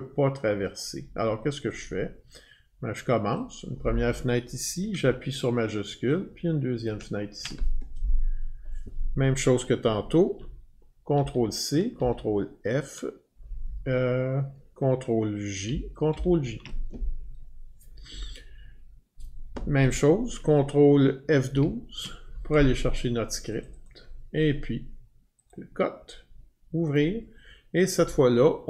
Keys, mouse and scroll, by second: 0.7 click, 1.7 click, 3.3 click, 6.9 shift+click, 11.1 ctrl+c, 12.0 ctrl+f, 15.7 ctrl+j, 16.1 ctrl+j, 21.5 ctrl+F12, 23.6 click, 23.8 click, 25.5 click, 26.9 click.